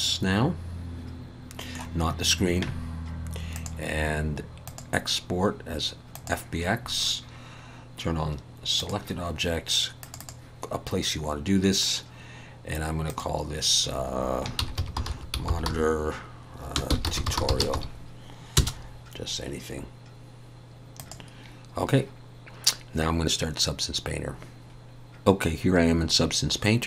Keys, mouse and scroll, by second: 3.5 click.